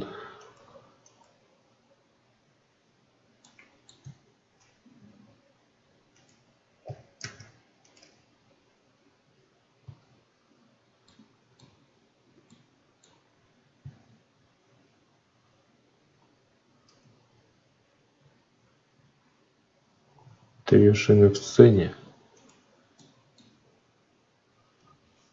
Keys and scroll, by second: 3.9 Tab, 7.1 alt+v, 9.7 ctrl+z, 13.7 ctrl+z, 16.8 Tab.